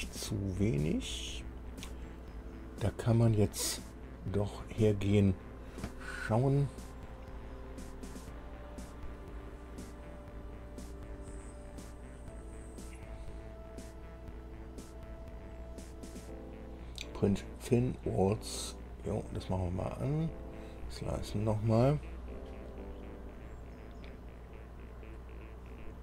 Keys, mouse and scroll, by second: 17.8 click, 20.3 click.